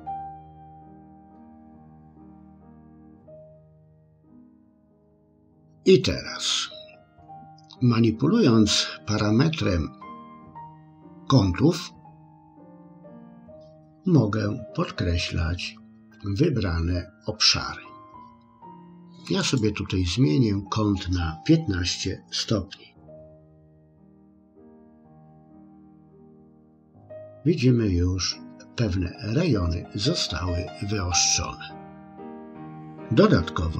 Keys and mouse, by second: 19.4-25.8 drag.